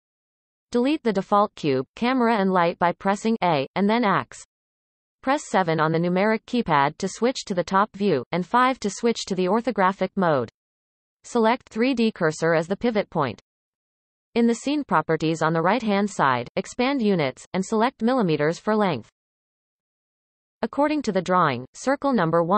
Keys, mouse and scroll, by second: 1.1 a, 2.6 x, 4.3 KP_7, 5.8 KP_5, 6.5 KP_5, 10.3-13.3 drag, 16.2-21.3 drag.